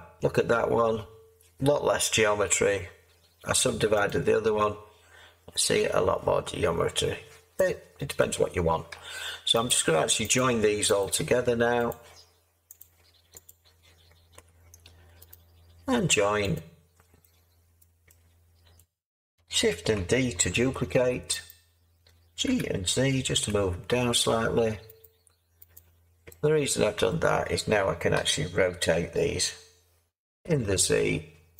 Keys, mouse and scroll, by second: 20.8 Tab, 20.8 d, 22.4 g, 23.3 z, 28.1 r, 30.3 z.